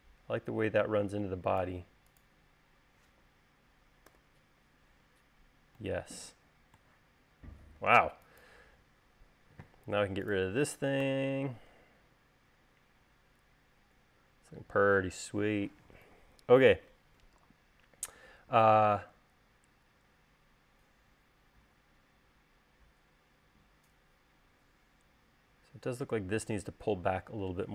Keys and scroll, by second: 4.7 u, 8.5 space, 11.6 BackSpace.